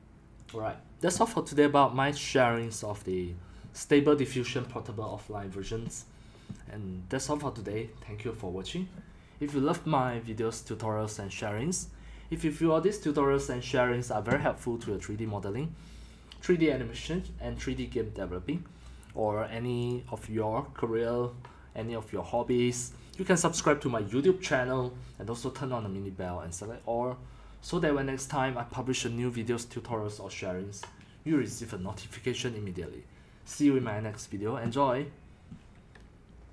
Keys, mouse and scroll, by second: 0.5 click, 2.6 click, 14.7-15.6 scroll, 15.6-18.0 scroll, 19.9 click.